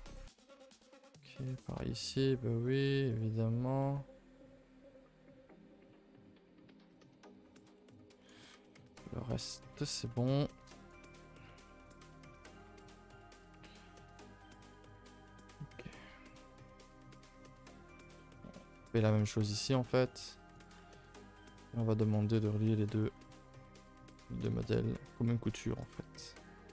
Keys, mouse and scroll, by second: 0.1 middle click, 0.6-1.2 scroll up 4, 0.8 middle click, 1.2 middle click, 2.1 shift+click, 2.6 shift+click, 3.1 shift+click, 3.5-3.8 scroll down 2, 3.8-6.8 middle drag, 8.5-13.3 middle drag, 13.3-13.8 scroll down 4, 13.8-15.3 middle drag, 15.3-15.9 scroll up 2, 15.9 shift+middle click, 16.1-16.7 scroll up 2, 16.7 alt+shift+click, 17.0 middle click, 17.8 alt+shift+click, 18.2-19.4 middle drag, 19.4 alt+shift+click, 19.7-21.4 shift+middle drag, 21.4 alt+shift+click, 21.8-22.9 middle drag, 22.9 alt+shift+click, 24.1 shift+middle click, 24.7-25.5 scroll up 1, 25.5 alt+shift+click, 25.9-26.7 middle drag.